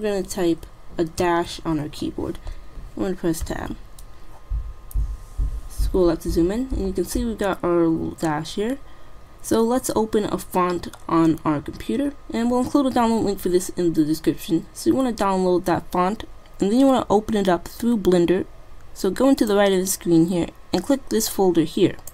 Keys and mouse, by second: 1.3 -, 3.5 Tab, 7.4 middle click, 8.3 middle click, 8.5-10.1 middle drag, 10.5 middle click, 11.2 middle click, 11.8-13.7 middle drag, 16.6 middle click, 19.6-21.1 drag, 21.1 middle click, 21.4 click.